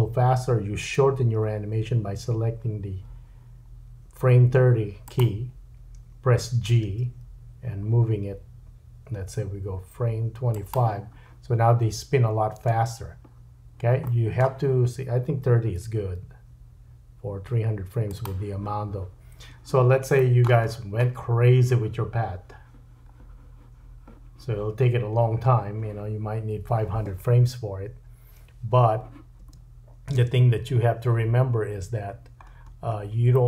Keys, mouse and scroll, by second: 5.0 click, 6.9 g, 11.2-12.0 scroll down 3, 12.0 space, 12.4-13.2 middle drag, 12.6 space, 13.2-13.6 scroll down 4, 13.3-21.0 middle drag, 15.8 g, 20.7-23.2 scroll down 4, 29.4 space, 30.2 space, 32.4-33.0 scroll up 4, 33.3 middle click.